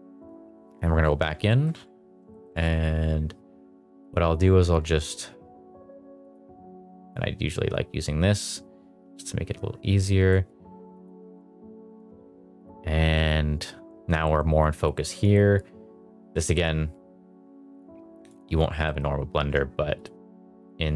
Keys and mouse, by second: 0.0 drag, 1.4 shift+middle drag, 2.3 shift+middle drag, 4.0 click, 5.1 click, 6.2 click, 7.1-10.3 drag, 10.9 click, 16.4 middle drag, 18.2 click, 18.8 middle drag, 19.9 click, 20.6 click.